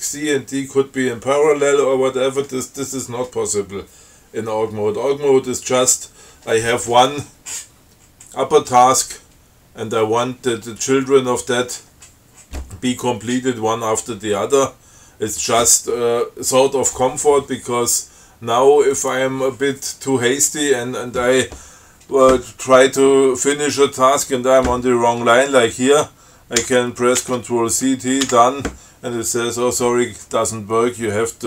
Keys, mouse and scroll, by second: 19.3 click, 26.9 ctrl+c, 27.5 ctrl+t, 28.5 d.